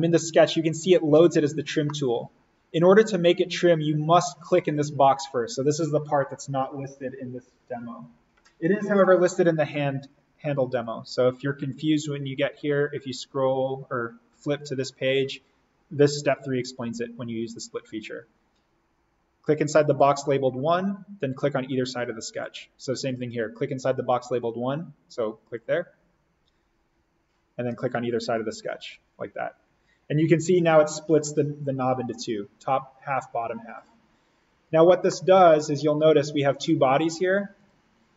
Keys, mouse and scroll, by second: 1.7 scroll up 1, 1.8 middle click, 2.0 scroll, 9.9 click, 10.6 click, 11.4-11.7 scroll down 1, 12.1 scroll down 1, 13.0 scroll down 1, 16.2-16.8 scroll up 1, 22.2 click, 25.3 click, 28.1 click, 29.9 scroll down 1, 33.6 click, 35.0 middle click, 36.1 click.